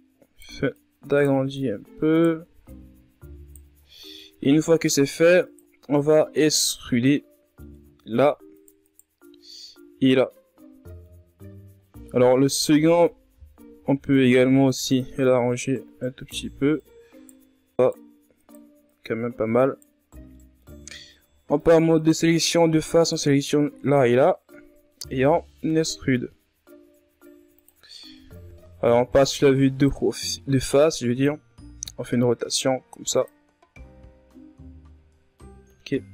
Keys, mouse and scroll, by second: 0.3 right click, 1.1 right click, 2.0 ctrl+z, 2.2 right click, 4.4 ctrl+Tab, 4.7 right click, 5.0 right click, 5.3-6.1 scroll down 1, 6.1 shift+right click, 6.5 scroll down 1, 6.7-8.1 middle drag, 8.1 shift+right click, 8.4 shift+right click, 8.9-11.0 middle drag, 11.0-11.4 ctrl+scroll up 4, 11.4-12.5 middle drag, 12.5 KP_3, 13.3 scroll up 2, 14.5 ctrl+Tab, 15.1 right click, 16.3 right click, 18.6 right click, 19.4 right click, 20.0 right click, 21.1 scroll down 3, 21.4-22.8 middle drag, 22.8 ctrl+Tab, 23.0 right click, 23.4 shift+right click, 24.1 shift+right click, 24.4 shift+right click, 24.8-26.4 middle drag, 26.4 e, 29.2 KP_1, 30.9-32.7 drag, 32.7 r, 34.5-35.5 scroll down 8, 35.5-36.1 scroll up 4.